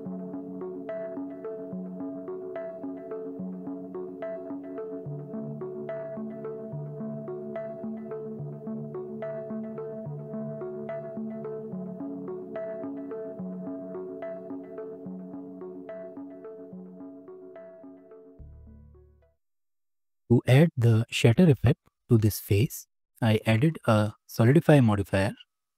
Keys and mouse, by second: 0.0-1.4 typing, 2.8 click, 3.1 g, 4.3 g, 5.8 shift+d, 6.4 g, 8.1 shift+middle click, 8.5 n, 8.8 click, 9.1 shift+n, 9.1 shift+middle click, 10.2 click, 10.7 shift+click, 11.7 shift+d, 12.8 r, 13.9 shift+d, 14.5 r, 15.8 g, 18.3 click, 18.7 n, 19.0 click, 19.1 right click, 22.2-22.8 drag, 23.9-25.7 shift+middle drag.